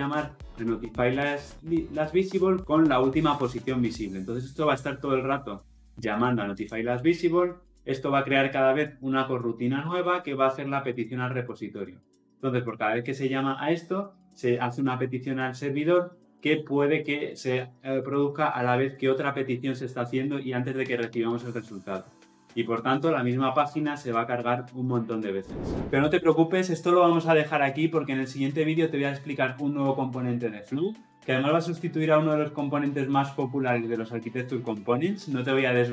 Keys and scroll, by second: 6.6 ctrl+b, 10.7 ctrl+b.